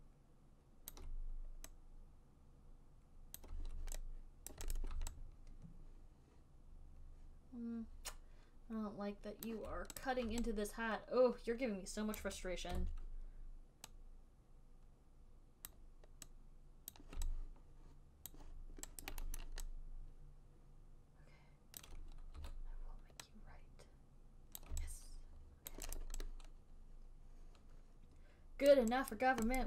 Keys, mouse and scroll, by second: 1.2 alt+click, 3.7 click, 4.9 right click, 5.1 click, 6.6 click, 9.7 alt+click, 10.3 click, 12.5 click, 12.8 alt+click, 13.0 e, 16.0 click, 16.0 e, 17.2 click, 18.6 alt+click, 19.4 alt+right click, 19.7 alt+middle click, 21.3 alt+middle click, 22.1 alt+click, 22.7 w, 24.9 click, 26.0 alt+click, 26.3 alt+click, 27.9 alt+click, 29.0 alt+right click, 29.5 alt+right click.